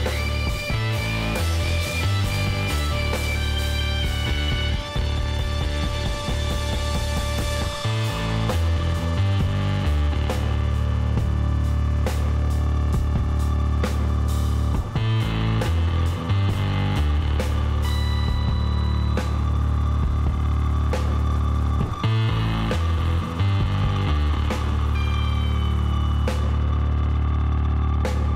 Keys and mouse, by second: 0.3-1.4 drag, 0.3 x, 3.0 Tab, 3.2 middle click, 3.9 a, 4.1-6.0 middle drag, 6.3-7.7 drag, 7.2 KP_Divide, 7.7 middle click, 10.7-12.8 middle drag, 12.8-14.7 drag, 18.5-21.0 middle drag, 19.9 a, 21.8 Tab, 23.1 middle click, 24.9 middle click, 25.2-26.6 drag.